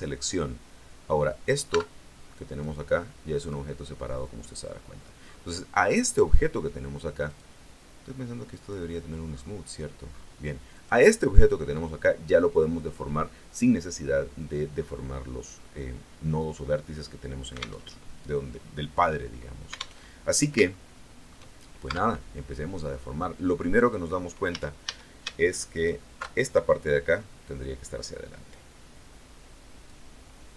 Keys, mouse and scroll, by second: 0.1 click, 1.6 Tab, 2.3 right click, 3.3 right click, 4.7-5.1 scroll down 1, 5.1-5.5 scroll up 1, 7.2 right click, 8.5 click, 9.2-9.5 scroll down 2, 9.5 middle click, 10.0 scroll up 2, 10.7 right click, 17.7 alt+Tab, 19.9 alt+Tab, 20.6 shift+middle click, 21.8 Tab, 24.4 a, 25.6 alt+shift+right click, 27.3-29.9 drag.